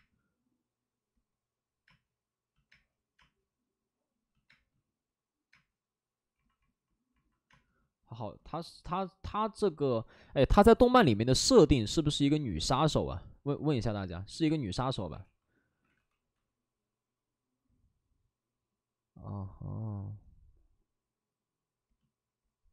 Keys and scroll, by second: 1.8 space, 2.6 space, 4.4 space, 5.4 space, 15.1 ctrl+d, 15.1 ctrl+d, 15.7 ctrl+d, 15.9 w.